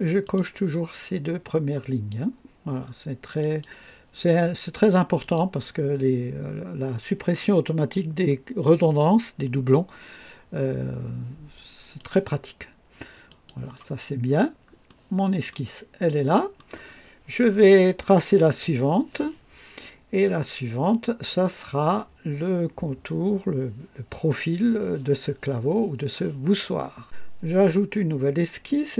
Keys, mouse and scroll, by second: 0.2 click, 3.4 click, 5.2 click, 12.0 click, 13.3 click, 14.2 scroll down 2, 14.9-16.8 right drag, 27.0 click, 28.7 click.